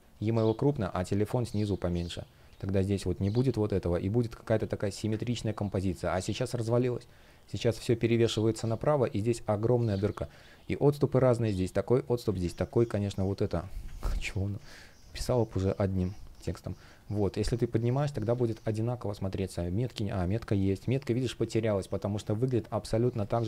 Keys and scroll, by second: 2.7 shift+p, 4.9 super+z, 9.7 super+z, 14.2 super+z, 17.6 shift+p, 18.2 space, 21.3 shift+p, 22.9 space.